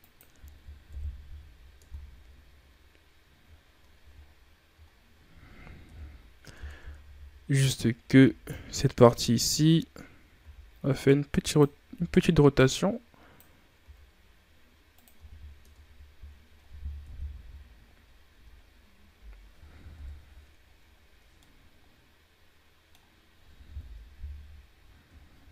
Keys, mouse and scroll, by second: 0.7 KP_1, 1.2 z, 1.7 Tab, 2.3-2.9 scroll down 3, 2.9-3.4 scroll down 4, 3.4-4.1 shift+scroll up 5, 4.2 scroll up 1, 4.8-5.7 shift+scroll down 3, 5.7 KP_3, 6.4 Tab, 6.9 z, 7.5 right click, 8.1 b, 12.4-13.7 drag, 13.7 r, 15.0 z, 15.5 Tab, 16.1 scroll down 3, 16.9 KP_1, 19.8 KP_3, 20.8 ctrl+scroll down 3, 21.3-23.7 middle drag, 23.7 KP_1, 25.3 shift+scroll down 3.